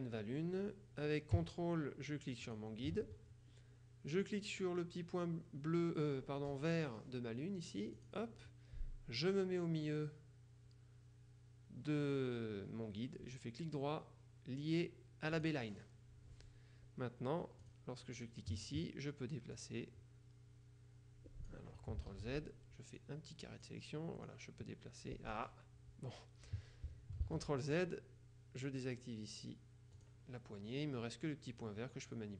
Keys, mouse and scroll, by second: 2.5 ctrl+click, 8.1 click, 13.3 right click, 15.5 click, 17.7 click, 19.6-22.1 drag, 22.2 ctrl+z, 23.1-24.2 drag, 24.3-25.9 drag, 27.3 ctrl+z, 30.1 click, 31.7-32.3 drag.